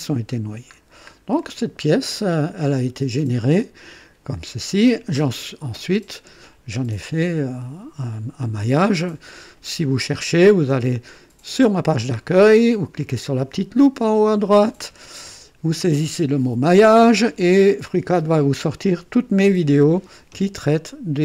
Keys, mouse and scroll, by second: 0.3 scroll up 2, 0.7-1.0 scroll down 2, 1.4-2.5 drag, 2.7 scroll down 1, 3.6-4.5 right drag, 4.9-5.2 scroll down 1.